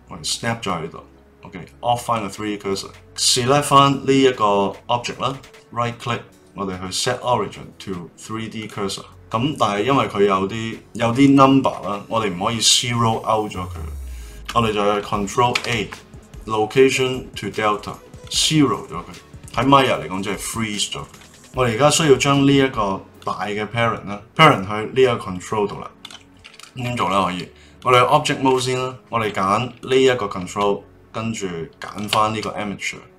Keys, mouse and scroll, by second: 2.0 click, 3.0 click, 3.6 click, 5.3-8.3 right drag, 15.5 ctrl+a, 23.2 click, 26.0 click, 27.0 Tab, 27.8 click, 29.8 click, 31.9 shift+click.